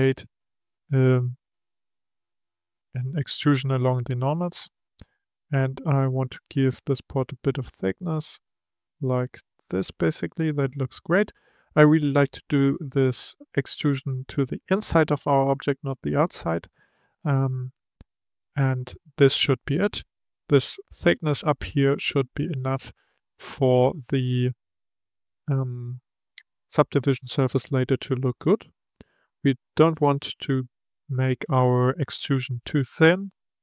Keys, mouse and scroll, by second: 29.0-29.6 scroll up 1, 29.6-32.6 scroll up 1.